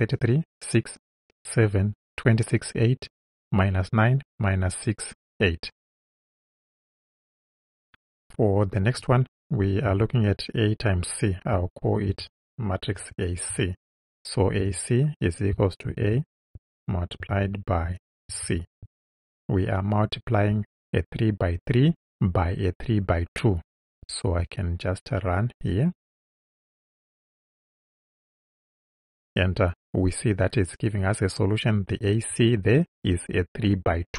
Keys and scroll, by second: 9.9 Return, 12.1 shift+a, 13.0 shift+c, 14.6 =, 15.5 shift+=, 15.9 shift+a, 17.2 shift+8, 18.3 shift+c.